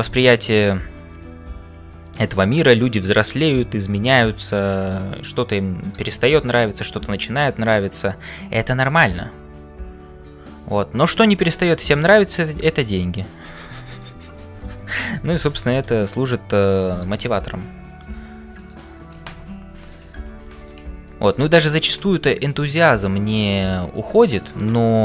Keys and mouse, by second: 0.0-25.0 typing, 12.6 shift+middle click, 13.9 alt+click, 15.2-16.6 ctrl+KP_Add, 18.0 shift+right click, 18.6 shift+right click.